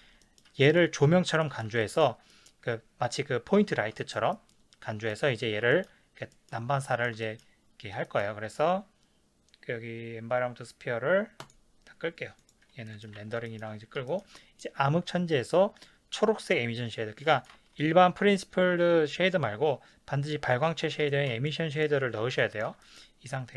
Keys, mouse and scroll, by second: 11.4 click, 12.4 click, 12.9-23.5 middle drag, 13.2 ctrl+s.